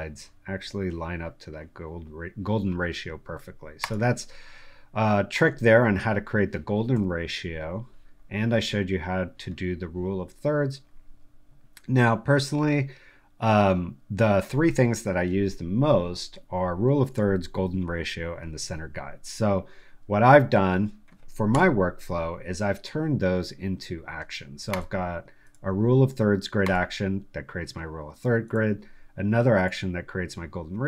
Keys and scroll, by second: 6.9 v, 18.6 1, 21.5 0.